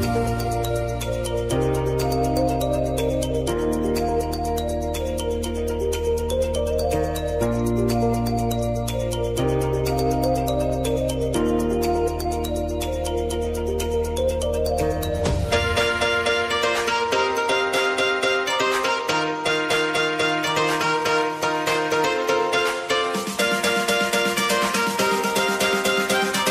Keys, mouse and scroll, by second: 0.8-3.1 drag, 4.2 u, 5.7 click, 7.7 ctrl+shift+c, 8.7-13.1 typing, 12.4 Return, 14.5 click, 16.8-18.2 typing, 19.0 click, 21.6 ctrl+d, 22.9-25.3 drag.